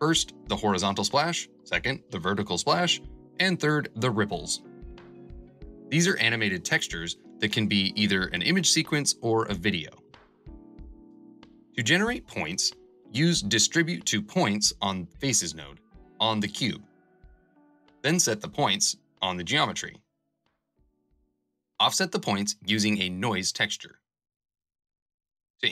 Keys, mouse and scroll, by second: 20.9 shift+a, 24.7 ctrl+j, 25.2 F2.